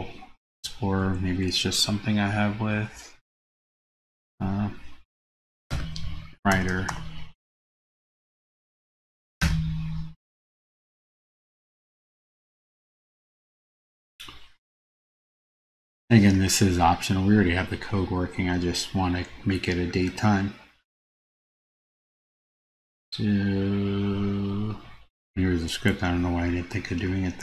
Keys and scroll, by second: 0.2 super+c, 1.2 super+Tab, 5.9 super+space.